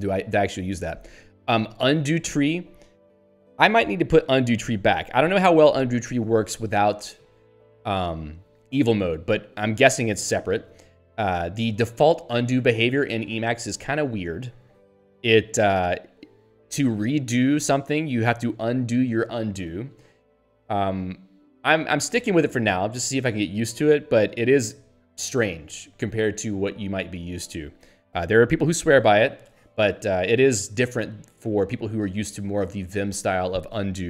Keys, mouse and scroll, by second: 1.8 click.